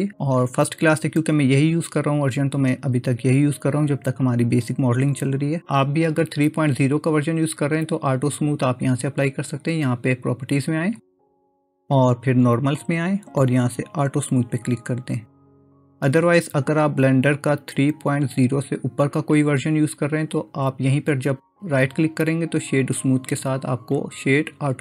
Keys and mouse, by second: 12.6 click, 14.7-20.3 drag, 21.1-24.8 right drag.